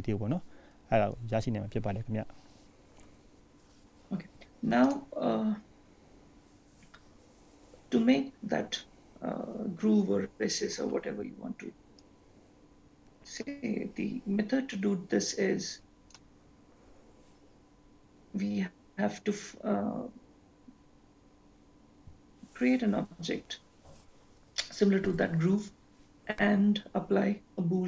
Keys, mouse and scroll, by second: 2.8-3.8 scroll down 4, 3.8-4.5 scroll up 5, 4.5-5.2 scroll up 3, 5.2 click.